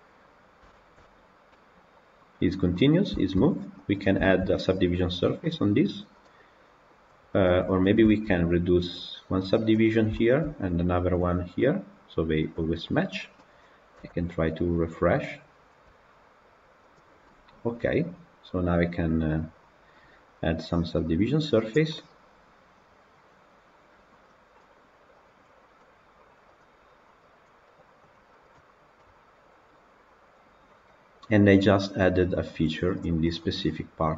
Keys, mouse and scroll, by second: 0.1-0.5 scroll up 3, 0.5-0.9 shift+middle drag, 0.9-1.4 scroll up 3, 1.4-2.5 middle drag, 2.5-3.2 scroll down 7, 3.0 shift+middle drag, 3.2-3.8 middle drag, 3.8 click, 4.0 scroll down 1, 4.1-7.2 shift+middle drag, 7.2-7.6 scroll down 3, 7.6 click, 7.9-9.7 shift+middle drag, 9.7 click, 10.0-10.3 shift+middle drag, 10.3-11.1 scroll down 3, 11.1 click, 12.4-13.2 drag, 13.8 KP_Decimal, 14.4-16.4 scroll up 1, 16.4 click, 17.1-19.8 middle drag, 19.8-21.5 drag, 21.7-25.0 middle drag, 25.0 click, 25.6-27.7 middle drag, 27.7 click, 27.9-28.9 right drag, 28.9-32.1 middle drag, 32.1 click, 32.9 click, 33.1-34.1 middle drag.